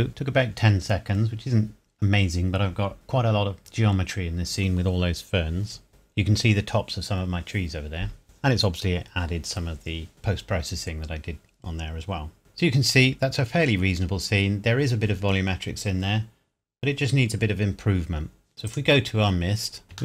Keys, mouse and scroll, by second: 12.4 scroll up 1, 13.5 scroll down 1, 14.5 scroll up 1, 17.5-18.1 scroll down 1, 18.5 scroll up 1, 18.7 click, 19.8 scroll up 1.